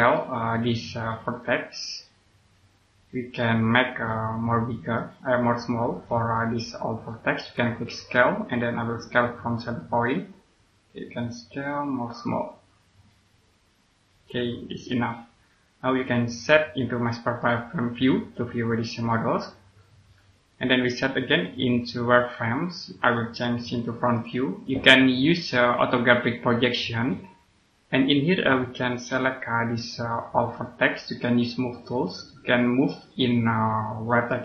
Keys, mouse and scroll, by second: 0.0 right click, 1.8 click, 3.9 right click, 5.8 click, 17.3 click, 27.3 scroll up 1, 28.8 right click, 30.7-32.0 scroll up 1, 32.0 click.